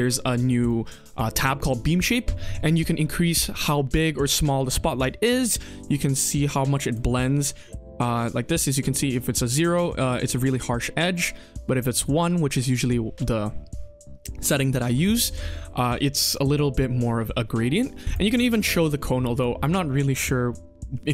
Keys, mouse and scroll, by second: 0.2 click, 0.5 click, 2.6-5.4 drag, 5.7-6.9 drag, 8.8 click, 11.5-11.9 drag, 18.0 click, 18.6 middle drag, 18.9-19.2 scroll down 3, 19.2 click, 19.6 KP_1, 19.8-20.4 scroll up 3, 20.4-20.9 middle drag, 21.0-21.1 scroll down 2.